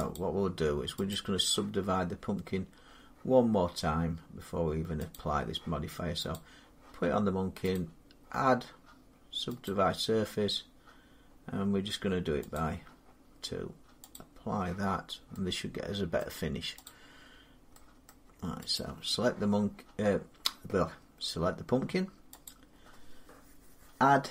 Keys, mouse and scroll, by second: 0.0 click, 0.4 Tab, 0.9 click, 5.0 click, 6.2 click, 7.6 click, 9.5 click, 12.4 click, 14.0 click, 16.0 middle click, 16.7 click, 17.9 middle click, 18.6 click, 22.3 click.